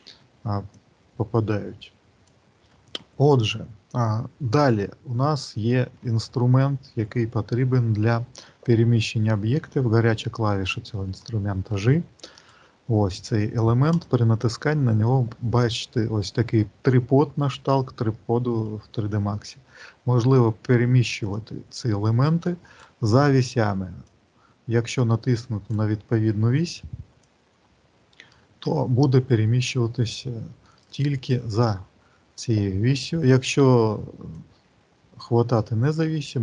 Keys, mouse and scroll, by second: 0.6 click, 12.1 click, 13.8 click, 17.9 shift+middle click, 18.9 middle click, 21.1 click, 24.0 click, 27.4 click, 34.3 click.